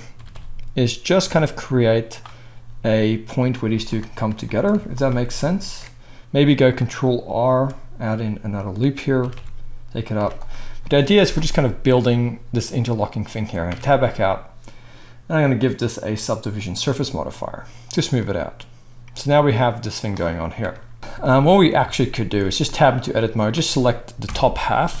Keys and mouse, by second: 0.1 g, 2.5 s, 3.2-4.4 middle drag, 3.6 z, 4.5 shift+middle click, 4.7 z, 5.6 ctrl+r, 7.5 s, 9.2 g, 9.7-15.7 middle drag, 10.1 z, 13.7 Tab, 15.7-21.0 drag, 20.6 KP_1, 21.0-23.0 shift+middle drag, 21.8 Tab, 22.4 z, 23.0-25.0 drag, 24.2 ctrl+l.